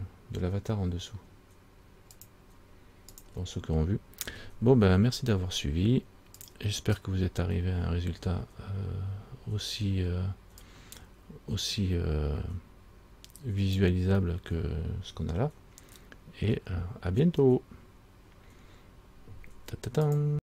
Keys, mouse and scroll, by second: 2.3 click, 3.4 click.